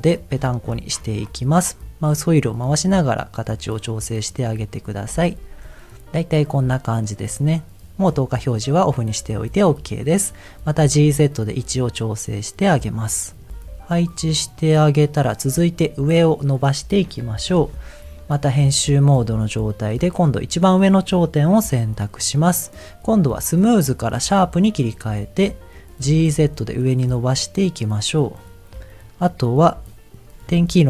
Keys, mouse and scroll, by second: 0.1-3.1 scroll up 15, 3.1 scroll down 1, 3.8-4.8 scroll down 1, 4.9 click, 5.3 Tab, 5.6 middle click, 8.4 click, 9.6 shift+middle click, 10.7 g, 10.9 z, 13.0 click, 13.3 click, 13.5 g, 13.5 z, 14.4 click, 14.7 click, 15.0 middle click, 17.1 shift+middle click, 18.6 Tab, 18.8 click, 19.4 click, 20.0 middle click, 20.6 click, 22.5-24.8 drag, 25.5 middle click, 26.0 g, 26.2 z, 26.6-27.0 scroll up 2, 27.5 scroll down 1, 28.2 click.